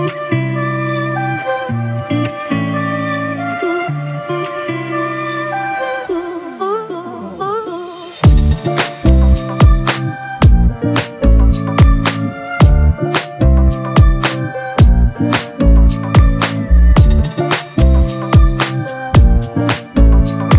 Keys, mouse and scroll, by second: 17.4 Return.